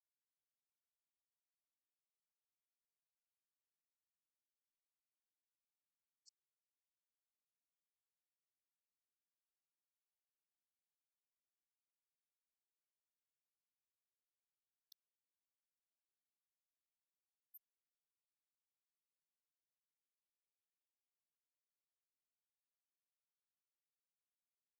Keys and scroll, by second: 14.8 ctrl+End, 18.0 Right.